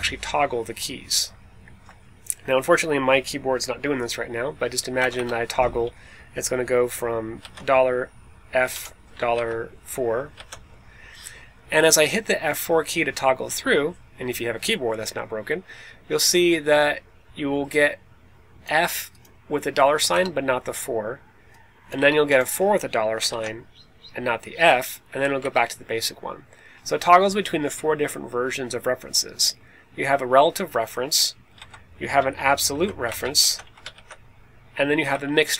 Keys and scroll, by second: 4.9 BackSpace, 5.1 BackSpace, 7.3 shift+4, 8.6 f, 9.2 shift+4, 10.3 4, 20.0 BackSpace, 21.9 BackSpace, 23.2 shift+4, 25.3 BackSpace, 31.5 Left, 32.6 shift+3, 33.0 BackSpace, 33.3 shift+4, 33.5 Right, 33.8 shift+4, 35.0 BackSpace, 35.5 Left.